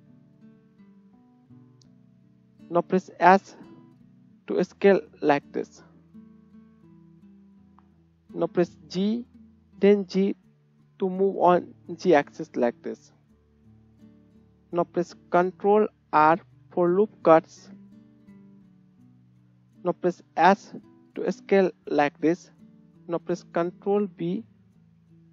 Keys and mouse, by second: 1.9-11.4 right drag, 3.1 s, 8.7 g, 11.4 click, 12.5-14.2 right drag, 14.7-16.2 ctrl+drag, 15.9 ctrl+r, 20.3 s, 21.6-23.6 right drag, 23.6 ctrl+click, 24.1 ctrl+b, 24.5-25.3 right drag.